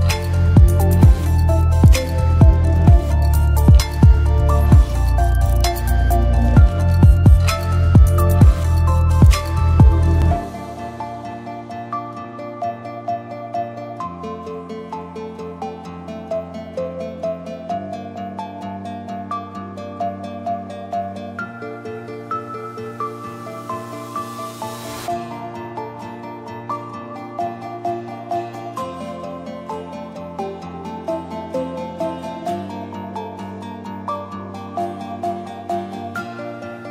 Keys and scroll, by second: 12.0-13.3 typing.